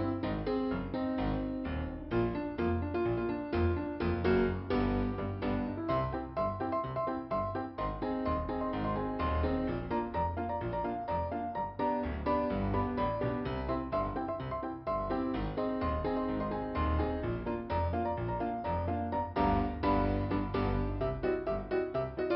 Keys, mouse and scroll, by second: 0.4-1.1 scroll down 1, 1.1 ,, 1.8 right click, 2.7 click, 2.9 click, 4.1 click, 4.9 click, 6.6 scroll down 2, 7.8 middle click, 11.0 scroll down 1, 11.8-12.6 scroll down 1, 14.2 scroll up 2, 15.8 click, 16.6 click, 16.8 click, 17.7 scroll down 2, 20.3 middle click.